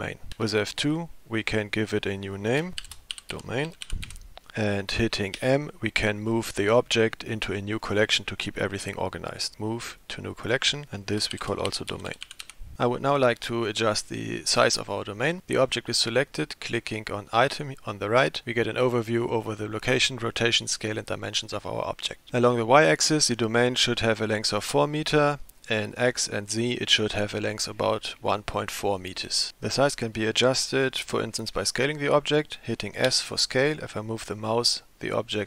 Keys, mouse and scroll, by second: 0.4 F2, 5.4 m, 17.5 click, 33.1 s.